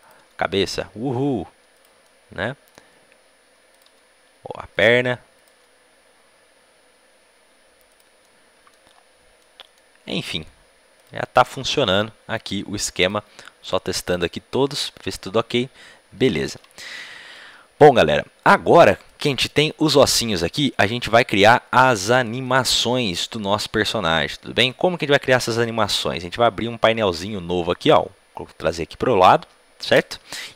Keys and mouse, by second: 0.2 g, 2.2 right click, 2.4 right click, 2.6 right click, 3.8 g, 5.5 g, 11.0-15.8 right drag, 11.0 g, 13.1 g, 15.8-17.4 middle drag, 16.4 ctrl+z, 18.7 middle click, 19.6-21.0 middle drag, 27.8-30.5 drag.